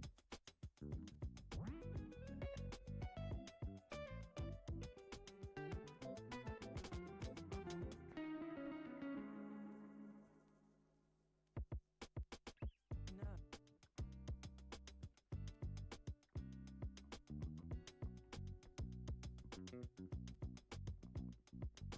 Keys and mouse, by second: 0.7 alt+z, 1.0-1.5 middle drag, 2.1 s, 4.5 a, 5.9 s, 7.2 click, 7.6 alt+shift+click, 8.1 shift+middle drag, 8.7 s, 9.7 e, 11.5 s, 12.3 Tab, 13.0 s, 15.6 g, 16.9-18.3 middle drag, 18.6-19.7 right drag.